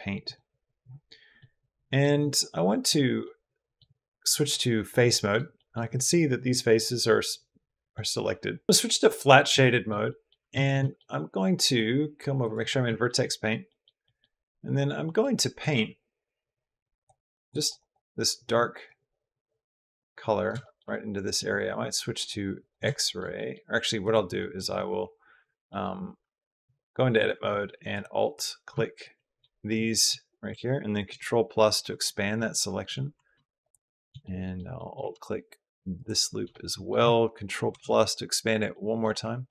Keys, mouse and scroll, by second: 1.2 middle click, 3.1 middle click, 4.9 middle click, 5.4 middle click, 6.6 middle click, 7.7 middle click, 8.8 click, 9.5 middle click, 9.9 middle click, 10.4 shift+click, 10.6 click, 11.4 click, 12.8 shift+click, 13.1 click, 13.5 click, 13.9 click, 14.8 click, 15.4 click, 17.0 click, 17.3 click, 17.6 click, 18.6 middle click, 20.7 middle click, 21.1 click, 22.4 click, 22.7 shift+click, 23.1 middle click, 23.9 right click, 24.2 middle click, 25.5 middle click, 26.0 Tab, 27.7 alt+click, 28.8 alt+shift+click, 29.5 click, 30.9 ctrl+KP_Add, 32.2 middle click, 33.5 alt+shift+click, 34.0 middle click, 34.5 middle click, 35.8 alt+shift+click, 36.3 middle click, 37.5 ctrl+KP_Add, 38.5 middle click, 39.2 click.